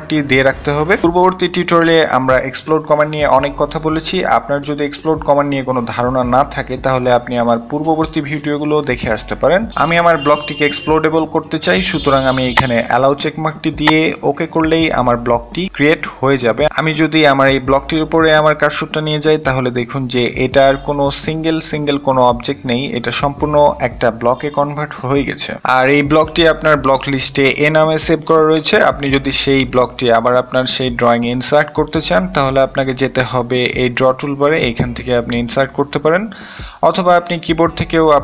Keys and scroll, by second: 37.0 i, 37.3 Return.